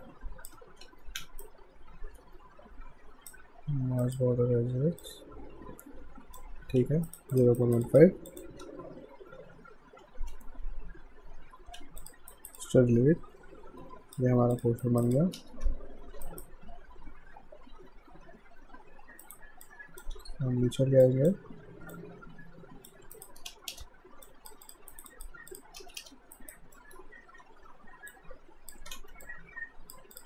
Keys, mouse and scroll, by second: 0.8 ctrl+z, 1.5 shift+right click, 4.0 alt+click, 6.8 q, 7.1 right click, 7.3 click, 7.6 right click, 7.9 click, 10.0 d, 11.4 ctrl+s, 12.0 click, 12.3 alt+right click, 12.6 alt+click, 14.8 alt+right click, 15.1 alt+click, 15.4 space, 16.2 alt+right click, 19.2 right click, 19.6 click, 19.7 click, 20.1 w, 21.1 click, 23.2 right click, 23.5 space, 24.3 alt+click, 24.9 alt+right click, 25.1 alt+click, 25.8 space, 26.4 alt+right click, 26.8 alt+middle click, 27.4 w, 28.1 click, 28.9 ctrl+z, 29.2 click.